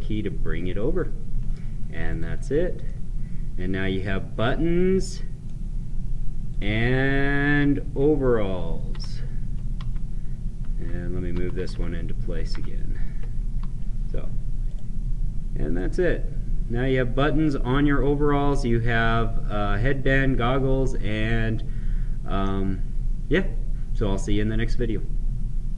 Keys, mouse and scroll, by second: 2.1 click, 2.8-6.5 right drag, 6.5 click, 7.7 Right, 8.9 ctrl+Up, 9.8 Down, 12.5 ctrl+Down, 14.6 click, 15.7-21.1 right drag, 25.7 click.